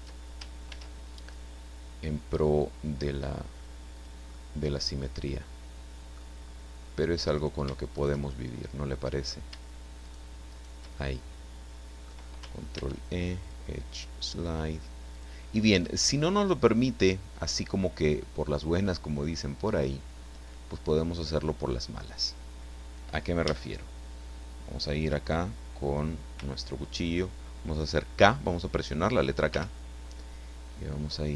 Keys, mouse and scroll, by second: 0.7 ctrl+e, 1.2 ctrl+click, 4.0 click, 4.4-6.3 middle drag, 7.3 right click, 7.9 shift+right click, 8.2-9.4 shift+middle drag, 10.0 shift+right click, 10.5 shift+right click, 11.2-12.2 shift+middle drag, 12.7 ctrl+e, 13.4 click, 15.1 click, 15.4-15.8 scroll down 1, 15.8-21.0 middle drag, 21.2-21.6 scroll up 1, 21.8 scroll down 1, 23.4 a, 29.5 k.